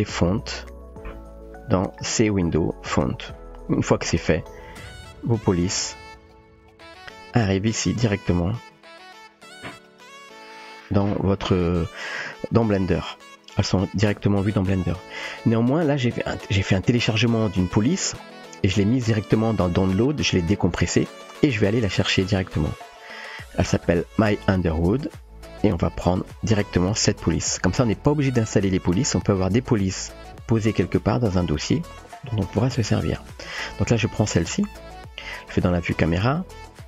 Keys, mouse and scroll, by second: 0.1 click, 1.8 click, 4.7 click, 6.2 click, 6.7 click, 6.8 typing, 9.9 click, 21.1 click, 23.6 click, 24.8 click, 25.0 click, 26.4 click, 26.7 click, 35.9 KP_0.